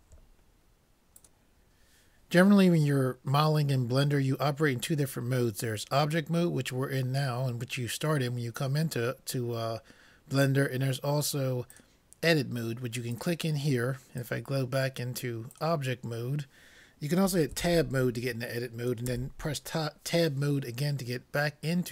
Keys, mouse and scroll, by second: 11.7-13.4 drag, 14.2-15.9 drag, 17.6 Tab, 19.1 Tab.